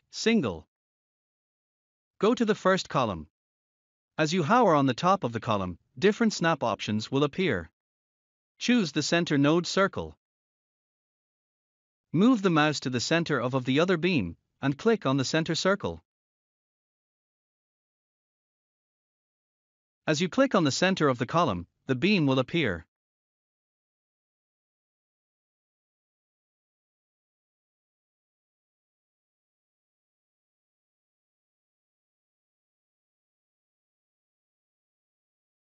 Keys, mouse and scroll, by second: 0.1 click, 1.9-2.8 scroll up 1, 10.7 click, 13.0 scroll down 1, 20.2 scroll up 1, 29.9 click, 33.2 scroll down 1.